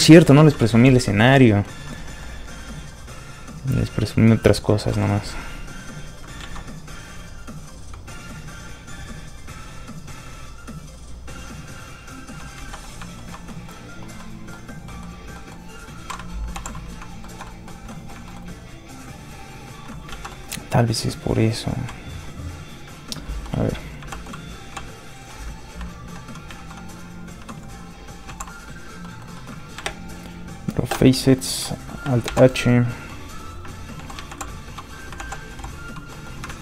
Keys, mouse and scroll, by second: 0.8 shift+z, 1.1 shift+middle click, 1.3 middle click, 1.4 middle click, 2.9 click, 4.7 middle click, 4.7 click, 4.8 shift+middle click, 5.0 middle click, 5.6 click, 6.4 ctrl+z, 12.5 click, 12.6 ctrl+z, 12.8 middle click, 13.1 shift+middle click, 13.5 middle click, 13.6 middle click, 13.7 scroll down 1, 14.2 middle click, 14.7 scroll down 1, 14.8 middle click, 16.5 alt+h, 17.2 shift+middle click, 17.4 middle click, 17.5 middle click, 18.2 shift+middle click, 20.0 click, 20.1 ctrl+z, 20.3 middle click, 24.1 shift+h, 24.7 h, 26.5 alt+super+h, 27.3 alt+h, 28.2 alt+h, 29.0 middle click, 29.1 middle click, 29.8 shift+space, 31.5 alt+space, 32.2 alt+h, 32.9 middle click, 33.0 middle click, 33.9 alt+h, 35.1 alt+h, 36.1 middle click, 36.5 ctrl+shift+click.